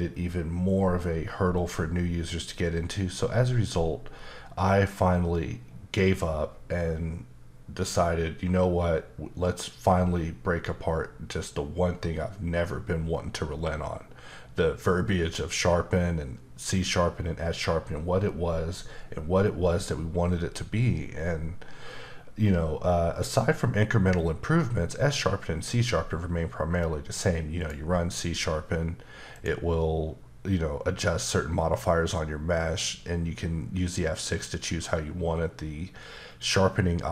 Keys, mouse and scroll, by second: 27.6 click, 29.3 click.